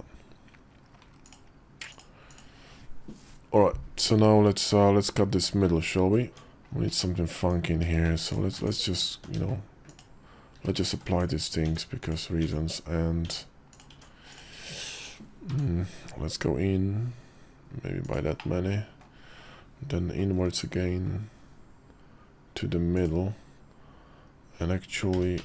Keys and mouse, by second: 1.0-2.3 drag, 4.3 `, 4.9 KP_5, 6.3 Tab, 7.1 Tab, 7.6 q, 8.4 Tab, 9.0 Tab, 9.6 click, 10.3 q, 10.9 Tab, 11.4 Tab, 11.8 click, 12.2 Tab, 13.0 Tab, 13.5 click, 13.7 Tab, 14.1 click, 15.3 i, 18.3 middle click, 20.1 i, 24.9 g.